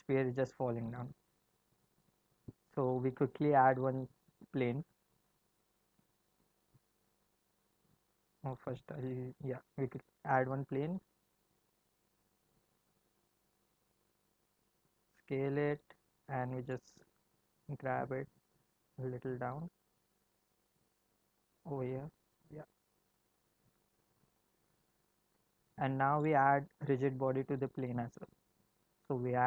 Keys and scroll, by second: 5.7 shift+a, 10.2 shift+a, 14.1 s, 17.0 g.